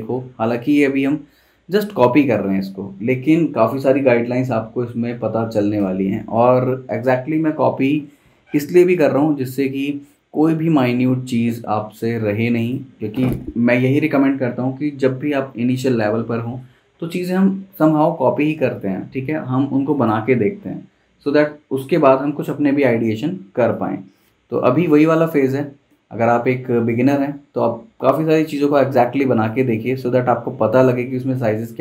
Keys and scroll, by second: 6.5 v.